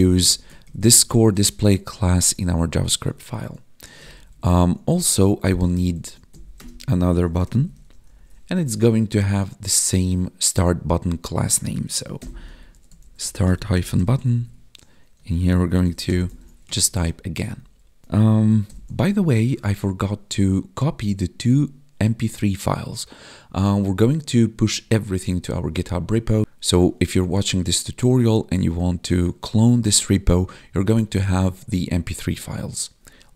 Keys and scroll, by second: 0.6 ctrl+shift+Right, 0.9 ctrl+shift+Left, 1.3 ctrl+shift+Right, 1.4 ctrl+shift+Left, 1.5 ctrl+shift+Right, 1.6 ctrl+shift+Left, 2.3 Right, 2.9 ctrl+s, 3.9 ctrl+Right, 6.3 Right, 14.4 Tab, 16.2 ctrl+n, 16.3 ctrl+s, 16.6 Escape, 17.4 Right, 17.5 Left, 18.6 ctrl+b.